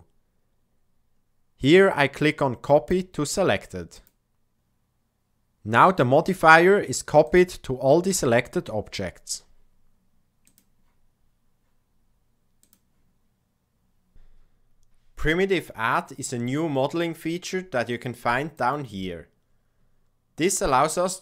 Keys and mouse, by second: 7.1 click, 18.5 click, 20.6-21.2 drag.